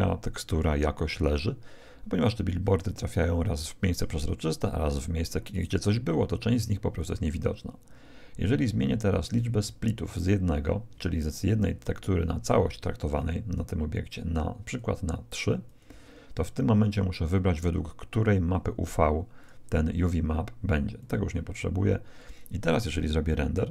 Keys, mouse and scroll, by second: 14.6-17.3 drag, 18.5-20.4 drag, 20.9-22.7 drag.